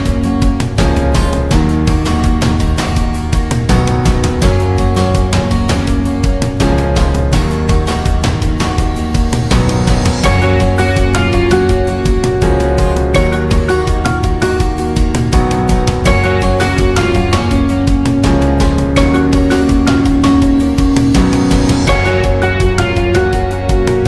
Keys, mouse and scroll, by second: 3.9 click, 7.6-9.3 shift+drag, 9.7 alt+scroll down 1, 9.9 space, 10.2 click, 10.5 space, 11.1 alt+scroll up 1, 11.3 space, 11.5 click, 11.8 space, 13.3 space, 13.5 click, 13.8 space, 14.1 alt+scroll down 1, 14.4 space, 14.6 click, 14.9 space, 16.3 click, 16.4 right click, 18.0 click, 18.7-21.1 alt+shift+drag, 22.3-24.0 alt+drag.